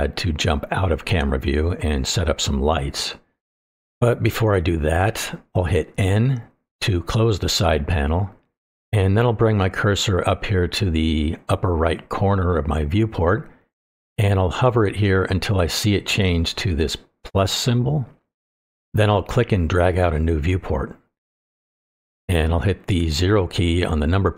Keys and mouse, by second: 1.7-2.0 shift+middle drag, 2.2-2.9 middle drag, 3.6-4.0 shift+middle drag, 4.1-4.7 middle drag, 7.5 n, 19.4 click, 19.7 middle click, 20.1-22.3 drag.